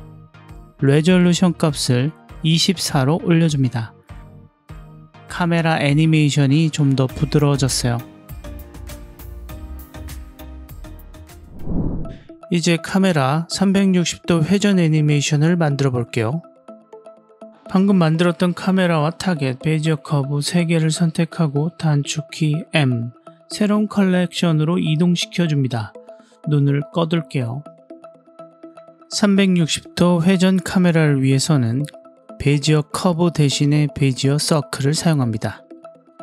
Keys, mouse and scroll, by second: 0.9-2.6 drag, 4.1-4.5 drag, 4.5 ctrl+alt+q, 4.6 space, 14.8-15.8 drag, 18.2-18.6 middle drag, 18.8-19.3 scroll down 2, 19.3-20.5 middle drag, 21.9 m, 26.0 drag, 26.9 drag, 27.5 click, 27.8 click, 28.2 ctrl+alt+q, 28.9 click, 31.6-35.2 scroll down 2, 35.2-36.2 scroll down 4.